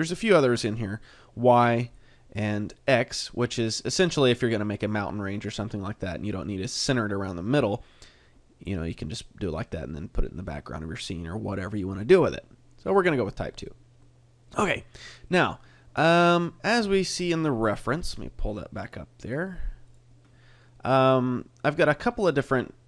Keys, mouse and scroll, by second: 0.0 click, 3.0 click, 3.4 middle click, 5.5 middle click, 6.2 middle click, 7.2 middle click, 9.6 middle click, 11.6 click, 14.0 middle click, 15.2 middle click.